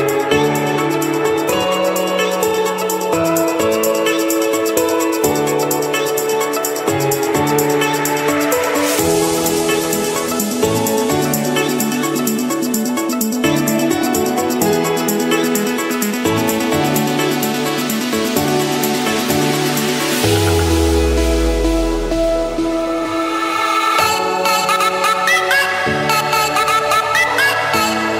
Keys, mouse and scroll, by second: 2.2 scroll down 4, 2.8-3.4 scroll up 6, 3.6-5.2 scroll down 6, 5.2 middle click, 5.2 scroll, 6.1 Escape, 9.8-10.5 typing, 11.5 click, 12.0 scroll down 3, 13.3-14.5 drag, 15.8 click, 16.4-18.2 drag, 19.0 click, 20.5 F7, 22.7-23.8 drag, 24.3-25.5 drag, 25.9-27.0 drag, 27.6-28.1 drag.